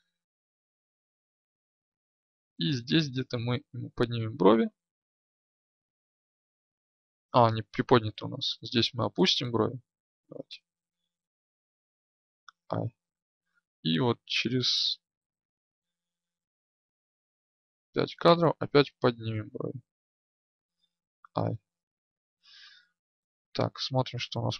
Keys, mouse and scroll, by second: 0.0-1.8 Right, 8.2 Left, 8.5 Left, 17.4 Left, 23.4-24.5 drag.